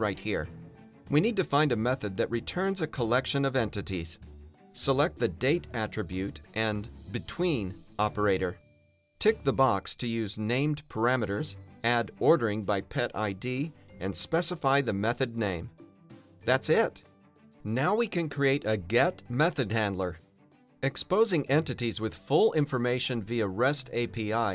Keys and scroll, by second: 1.2 Return, 2.5 Down, 15.8 Return, 17.3 shift+super+BackSpace, 18.0 super+b, 20.9 alt+Return, 21.8 Return, 24.2 Return.